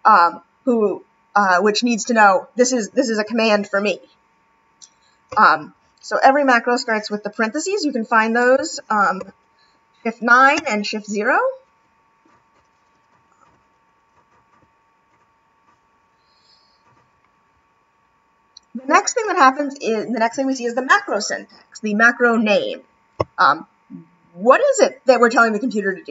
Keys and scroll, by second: 9.2 shift+9, 10.6 shift+0, 14.5 shift+9, 15.1 shift+0.